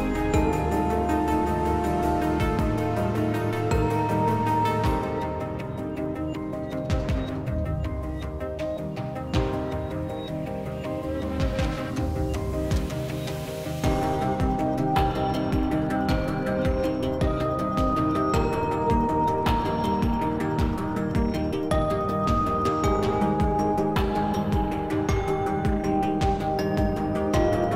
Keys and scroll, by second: 0.2 s, 9.6 z, 10.2 s, 22.6 b, 24.8 s, 27.2 s.